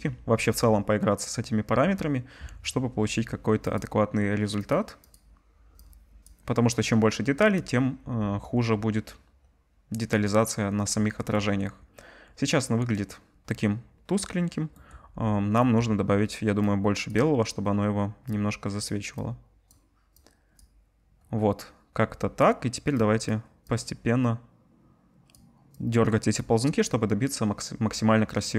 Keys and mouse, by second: 3.7 click, 5.1-16.6 drag.